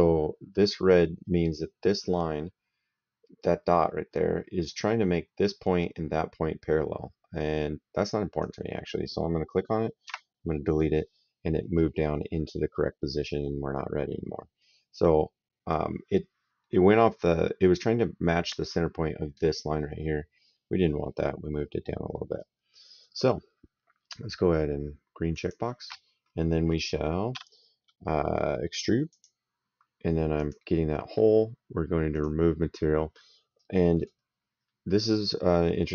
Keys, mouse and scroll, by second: 8.3 click, 9.9 Delete, 22.2 right click, 25.2 click, 27.2 s, 29.0 click, 30.2 click, 32.0 click, 33.4 right click, 34.5 middle click, 35.2 right click.